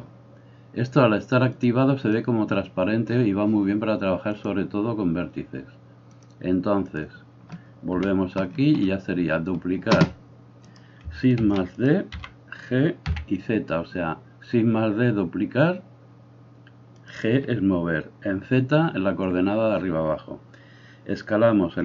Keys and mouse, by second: 0.0-1.7 middle drag, 1.7-6.4 drag, 6.4 middle click, 6.8 click, 7.0-10.7 middle drag, 7.9 KP_1, 10.7 right click, 11.0-21.8 shift+middle drag, 11.4 shift+d, 12.1 g.